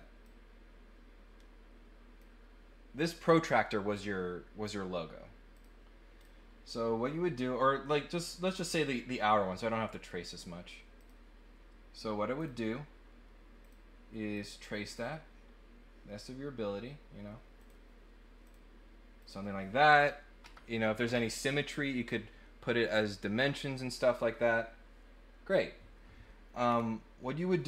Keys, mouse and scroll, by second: 0.2-2.1 drag, 5.5 click, 11.0 click, 12.4 click, 13.6 click, 14.3 click, 14.9 click, 17.6 click, 18.4 click, 19.2 click, 26.7 middle click, 26.7 scroll down 1.